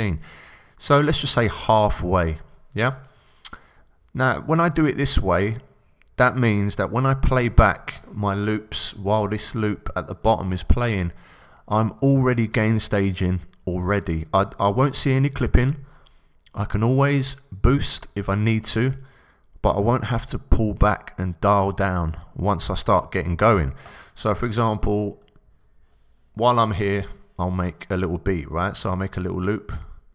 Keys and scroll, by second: 26.9 super+t.